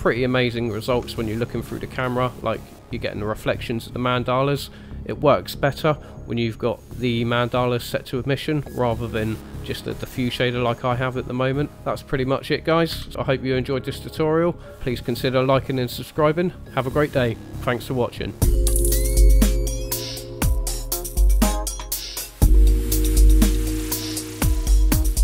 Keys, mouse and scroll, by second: 1.3-2.2 scroll up 2, 7.2 click, 11.7-12.2 scroll down 2, 12.2 click, 13.0 Delete, 13.7 click.